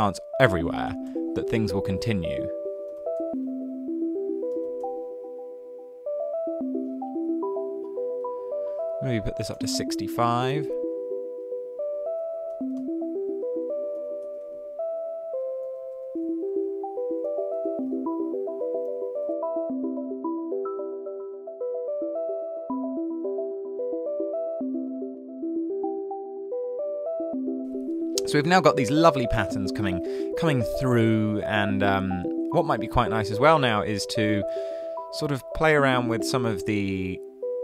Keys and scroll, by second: 0.0-1.0 typing, 2.6-5.1 typing, 9.1-10.8 typing, 12.0-19.3 typing.